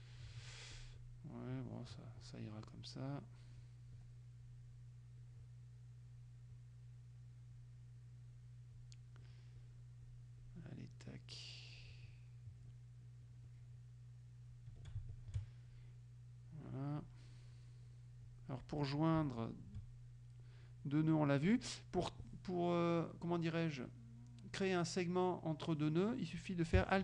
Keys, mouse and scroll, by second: 0.8 ctrl+click, 1.6 click, 2.2 click, 2.7 click, 3.6 click, 4.5 click, 5.3 click, 6.6 click, 7.6 click, 8.8 click, 9.6 click, 10.1 click, 10.5-12.0 drag, 13.5-14.7 drag, 15.2 shift+click, 15.8 shift+click, 17.0 click, 18.3 click, 18.9 click, 19.5 shift+click.